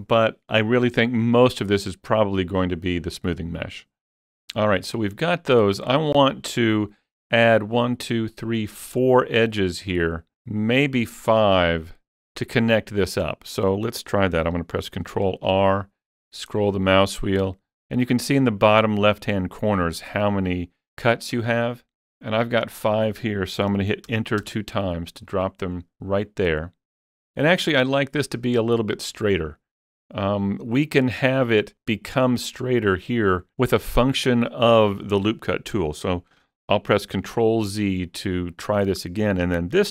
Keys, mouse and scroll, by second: 15.1 ctrl+r, 15.7-17.6 scroll up 4, 20.1 scroll down 1, 20.2 scroll down 1, 21.1 scroll up 2, 24.1 Return, 24.1 scroll up 1, 25.6 Return, 36.9 ctrl+Return, 37.2 ctrl+z.